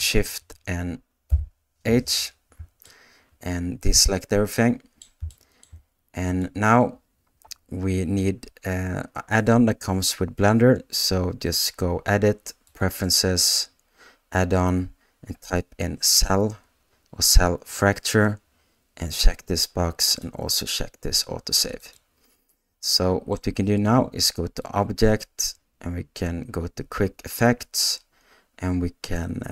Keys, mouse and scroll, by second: 1.3 shift+h, 2.8-5.0 middle drag, 5.3 shift+middle click, 12.8-21.9 drag, 22.9 middle click, 24.6-29.5 drag.